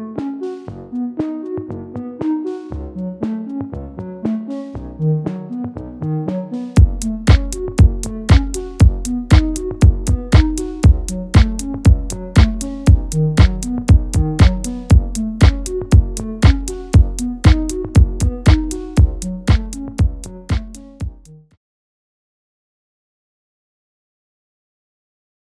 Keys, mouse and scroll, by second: 0.1-0.5 scroll up 1, 0.5-2.7 shift+middle drag, 2.7 click, 4.2 shift+middle click, 4.7-6.0 scroll up 2, 6.0 click, 9.5 click, 10.1 scroll down 1, 10.4 shift+middle click, 11.1-11.5 scroll down 2, 11.5-14.6 shift+middle drag, 14.6 click, 15.1-15.4 scroll down 2, 15.4 middle click, 15.9 Tab, 16.2 click, 16.6-16.9 scroll down 1, 16.9-25.5 middle drag.